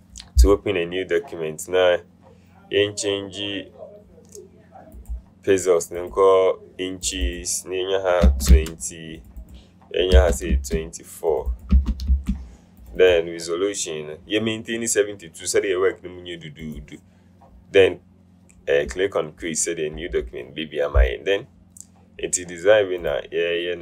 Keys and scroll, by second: 8.4 KP_2, 8.6 KP_0, 10.3 KP_2, 10.6 KP_4, 11.8 KP_2, 12.2 KP_4.